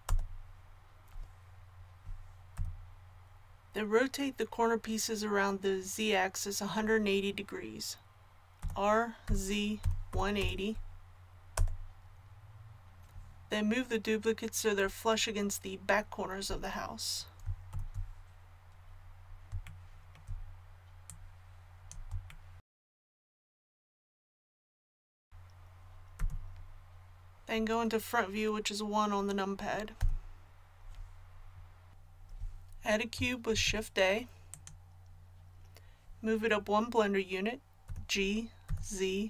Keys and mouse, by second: 8.6 r, 17.7 ctrl+KP_7, 21.1-26.2 drag, 26.2 a, 30.0 KP_1, 33.5 shift+a, 37.8 g.